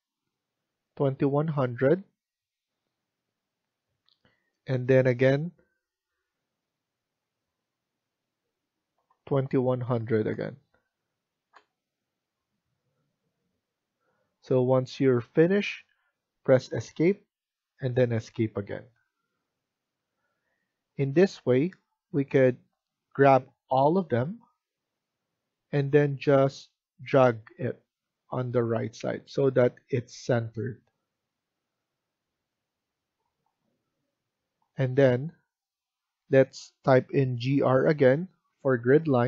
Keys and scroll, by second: 2.2 Return, 5.8 Return, 8.9-9.9 typing, 11.4 Return, 16.8 Escape, 17.8 Escape, 37.3 typing.